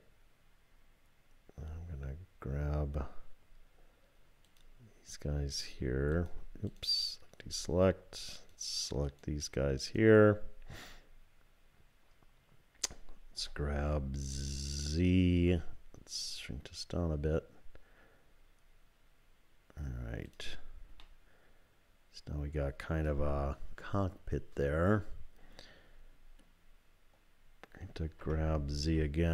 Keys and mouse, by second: 4.5 shift+click, 6.1 shift+click, 9.1 shift+click, 9.8 shift+click, 13.4 g, 21.2-24.9 drag, 28.2 g.